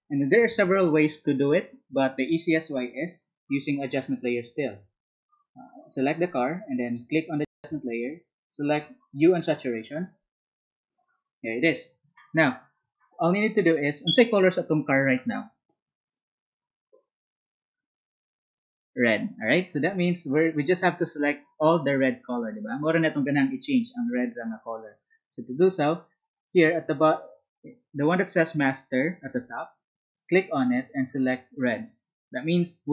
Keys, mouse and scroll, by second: 30.1 ctrl+click, 32.4 ctrl+click.